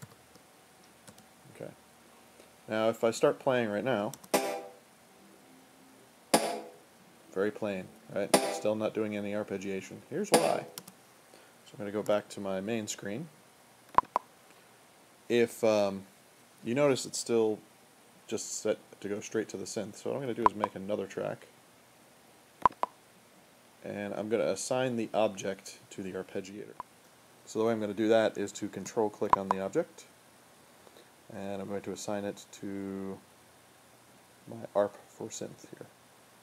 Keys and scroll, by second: 0.0-1.9 typing, 2.9-4.2 typing, 10.8 space, 12.0 super+1.